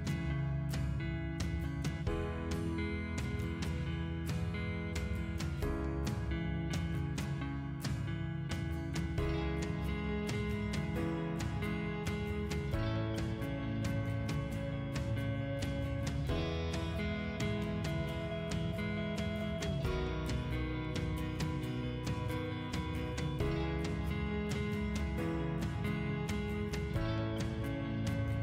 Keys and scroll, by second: 0.6 Escape, 4.3 o, 4.5 space, 8.6 Escape, 11.5 p, 11.9 space, 14.9 space.